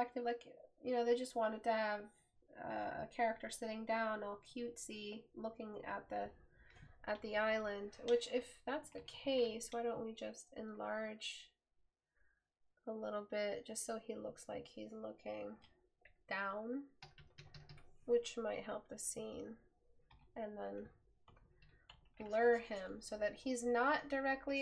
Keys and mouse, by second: 20.3 right click.